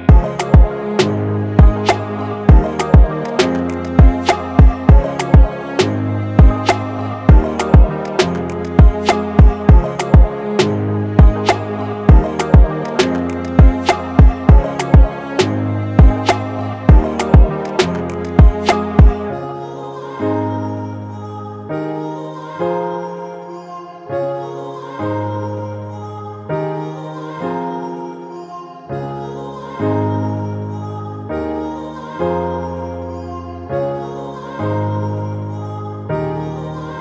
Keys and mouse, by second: 17.8 space, 24.2 space, 26.6 space, 31.4 space, 32.1 middle click, 34.6-37.0 drag.